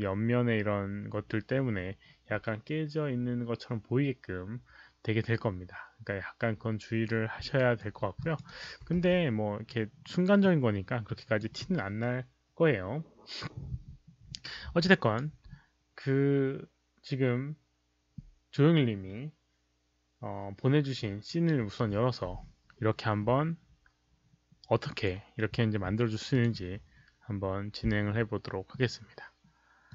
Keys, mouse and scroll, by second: 0.0-0.5 typing, 0.0 alt+click, 0.0 alt+right click, 1.8-2.5 typing, 2.0 alt+click, 2.0 alt+right click, 3.7 5, 5.4-6.1 typing, 7.5 alt+right click, 8.1 alt+click, 8.4 alt+right click, 8.9 q, 10.3-11.3 alt+drag, 11.1 alt+right click, 11.1 5, 12.3 alt+click, 12.3 alt+right click, 12.3 q, 13.7 alt+click, 13.7 alt+right click, 13.7 q, 13.8 alt+click, 13.8 alt+right click, 13.8 q, 14.6 alt+right click, 14.9 alt+click, 18.3 alt+click, 18.3 alt+right click, 18.3 q, 19.9 alt+click, 24.8 alt+click, 26.3 click, 29.8 click.